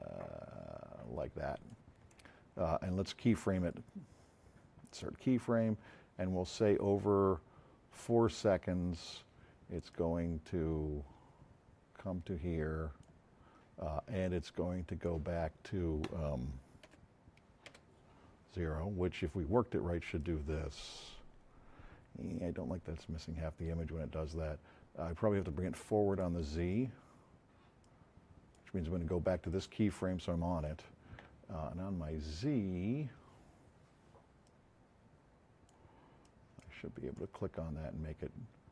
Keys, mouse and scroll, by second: 3.5 right click, 4.8 click, 6.5-7.5 drag, 12.9 click, 14.8 click, 16.9 KP_0, 17.6 KP_Enter, 27.8 click, 29.5 click.